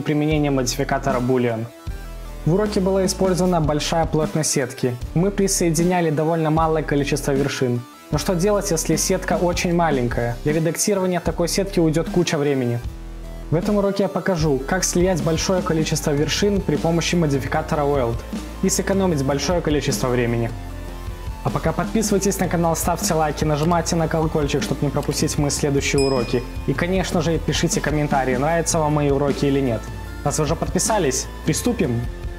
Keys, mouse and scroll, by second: 3.4 scroll down 4, 3.6-4.2 scroll up 1, 4.2 scroll down 1, 4.3 scroll down 1, 5.6 click, 6.4 click, 6.4 g, 6.6 g, 6.9-7.2 scroll down 3, 7.2 scroll up 3, 7.5 click, 7.6 g, 8.1 scroll down 6, 8.4-9.0 scroll up 5, 9.0 click, 9.1 g, 10.6 click, 10.7 g, 11.4 scroll down 5, 11.6-12.1 scroll up 2, 12.1 click, 12.2 g, 12.6 click, 12.8 g, 13.2 scroll down 2, 13.4-13.7 scroll up 4, 13.7 click, 13.8 g, 14.3-14.8 scroll down 7, 14.8-15.2 scroll up 2, 15.1 middle click, 15.2 click, 15.6 middle click, 16.7 click, 19.7-20.3 scroll up 2, 20.3 scroll up 4, 20.3 scroll down 4, 20.4-20.8 scroll up 1, 20.8 click, 21.5-21.8 scroll up 6, 21.8-23.5 drag, 23.5-24.3 scroll down 2, 24.7-26.0 drag, 26.0 scroll, 26.0 scroll down 4, 26.1 middle click, 26.6 scroll up 5, 26.7-27.1 scroll down 5, 26.8 middle click, 27.1-27.7 scroll up 6, 27.7 click, 28.3-28.6 scroll down 3, 28.6 click, 28.8 middle click, 29.0 scroll down 1, 29.1 scroll up 2, 29.3 scroll down 3, 29.5 scroll up 1, 29.6 middle click, 29.8 scroll down 2, 29.9 scroll up 1, 30.1 scroll down 2, 30.2 middle click, 30.7 scroll down 3, 30.7 scroll up 5, 30.8 middle click, 31.0 scroll down 1, 31.2 middle click, 31.6 scroll, 31.6 scroll down 2, 31.7 scroll up 1, 31.8 middle click, 32.0 scroll down 4, 32.1 scroll up 2, 32.3 click.